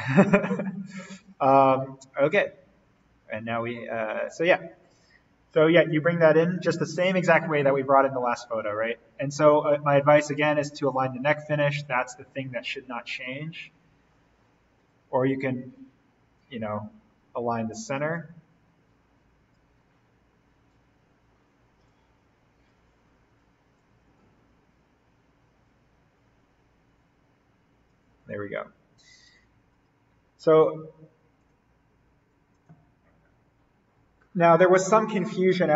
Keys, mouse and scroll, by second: 1.7-2.1 scroll up 1, 3.0 shift+click, 4.6-5.7 scroll down 1, 5.7-7.6 scroll up 1, 8.3 click, 9.6-10.9 scroll down 1, 10.9 click, 12.1-13.5 scroll up 1, 14.8-16.7 shift+drag, 16.7-17.2 scroll down 1, 18.1-21.3 drag, 21.3-21.9 scroll up 1, 21.9 shift+click, 23.0-23.8 scroll down 1, 23.8-28.3 drag, 28.3-29.1 scroll up 1, 29.7 click.